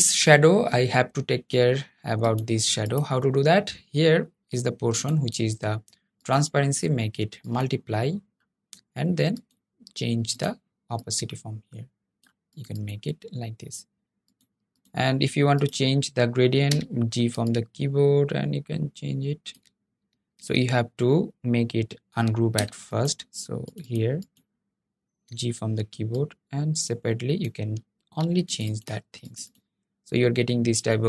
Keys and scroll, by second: 17.6 g, 20.1 super+z, 26.5 g.